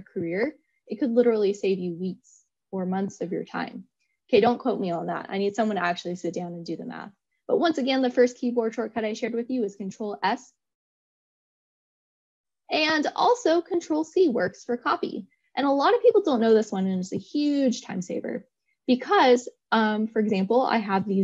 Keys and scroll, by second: 13.9 ctrl+c.